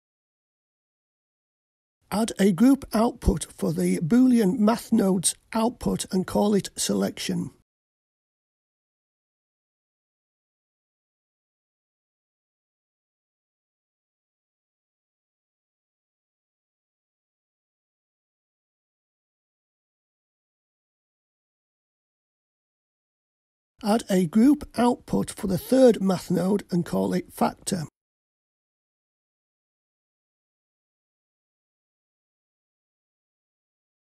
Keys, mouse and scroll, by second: 2.6-4.0 middle drag, 5.1 click, 5.5-6.6 drag, 8.3 click, 8.5-10.3 drag, 12.9 click, 14.1-14.9 scroll down 4, 14.9-15.4 scroll down 2, 16.1-21.0 drag, 26.6 click, 30.5 click, 31.8-34.0 drag.